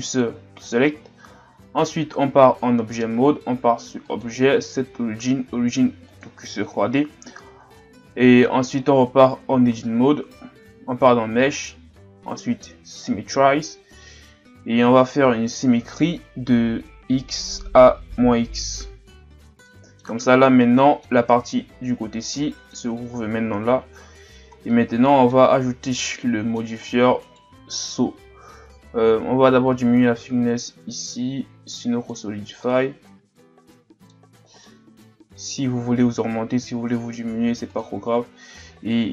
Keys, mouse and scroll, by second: 1.3-1.9 scroll up 2, 1.9 scroll down 1, 2.3 Tab, 4.1 click, 7.9-8.5 ctrl+scroll down 1, 8.6 Tab, 9.1 a, 9.5 a, 11.4 click, 17.0 click, 19.7-23.3 middle drag, 23.3 Tab, 23.8 a, 24.3 scroll down 1, 24.7-25.4 middle drag, 25.4-25.9 scroll down 1, 26.0-26.8 middle drag, 26.8-27.2 scroll up 2, 27.3 right click, 29.7 click, 32.4 a, 32.6-34.1 middle drag, 34.1-34.7 scroll up 2, 34.7-37.7 middle drag, 37.7 click.